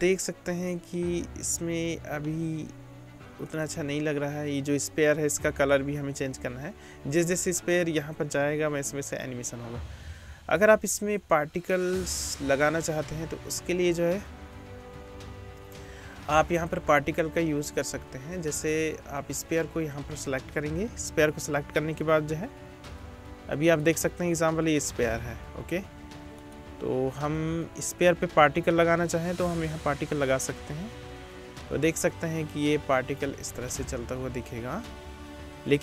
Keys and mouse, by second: 0.0 middle click, 1.5 middle click, 2.8-19.3 drag, 3.5 right click, 7.1 space, 17.9 space, 19.3 middle click, 19.5-23.7 drag, 23.7 middle click, 23.8 click, 26.4 middle click, 28.7 middle click, 28.8-29.6 drag, 29.6-33.6 middle drag, 31.6 space, 33.6 space.